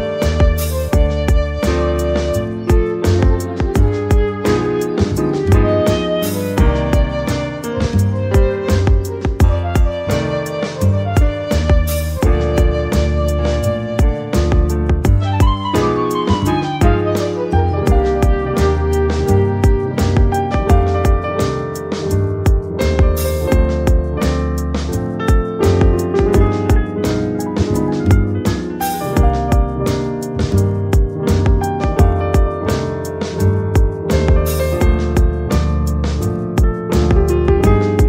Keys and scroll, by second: 3.6 space, 5.4 space, 7.4 ctrl+z, 9.0 space, 15.6 ctrl+j, 17.6 Delete, 18.6 Delete, 19.6 Delete, 33.2 ctrl+z.